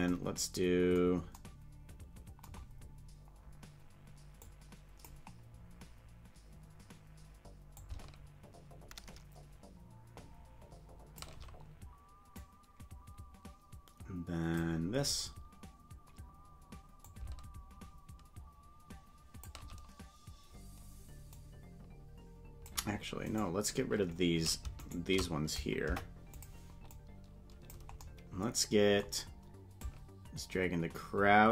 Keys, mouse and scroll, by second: 0.1 space, 4.5 click, 7.7-11.2 shift+drag, 12.4-19.5 drag, 21.4 click, 23.2-24.6 right drag, 24.8 shift+right click, 25.8 Delete, 27.0 click, 29.8-31.5 drag.